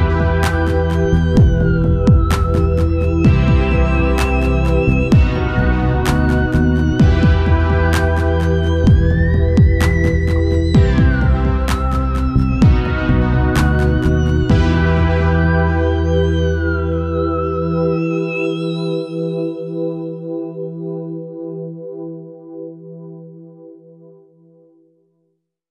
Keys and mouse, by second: 0.2-1.8 drag, 3.8-5.6 drag, 7.6-10.8 drag, 14.0 ctrl+s, 15.1-16.4 drag, 15.8 z, 16.4 z, 17.4 right click.